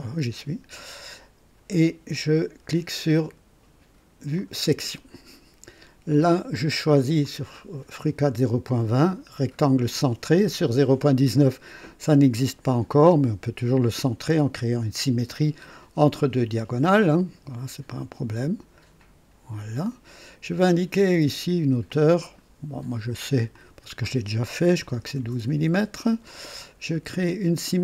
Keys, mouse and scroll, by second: 4.4 click, 7.2 click, 9.6 click, 13.6 click, 19.0 click, 19.9 right click, 21.9 click, 23.5 click, 24.7 KP_1, 24.9 KP_2, 25.2 KP_Enter.